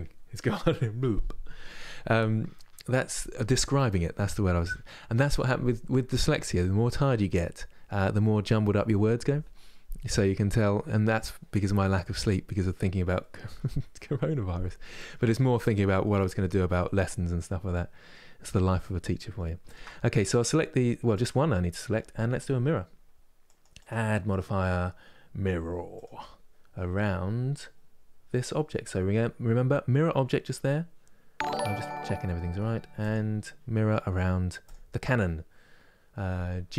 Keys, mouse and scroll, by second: 12.9-19.4 middle drag, 19.4 shift+click, 20.1 middle click, 20.8-35.7 drag.